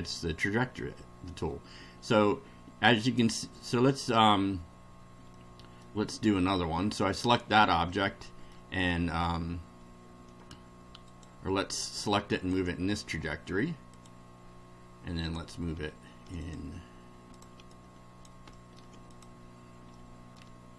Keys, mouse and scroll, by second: 0.1-1.6 middle drag, 1.8 scroll down 1, 3.0 click, 5.3-6.0 middle drag, 7.9-8.7 middle drag, 11.1 click, 12.4 ctrl+click, 13.9 click, 15.3 click, 16.4 ctrl+click, 17.3 click, 17.7-18.4 ctrl+drag, 18.5-18.9 ctrl+middle drag, 19.1 ctrl+click, 19.9 ctrl+middle click.